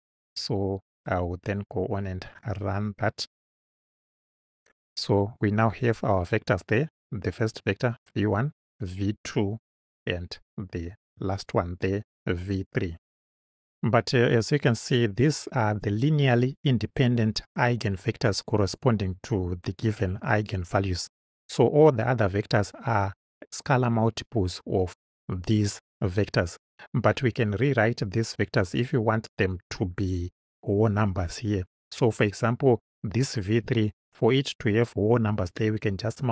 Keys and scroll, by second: 13.3 Right.